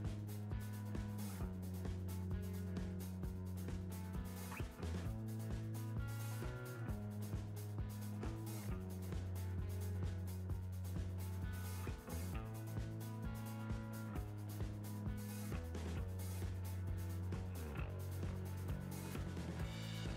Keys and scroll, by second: 1.2 Tab, 3.0 Tab, 14.0 Tab, 16.6 Tab.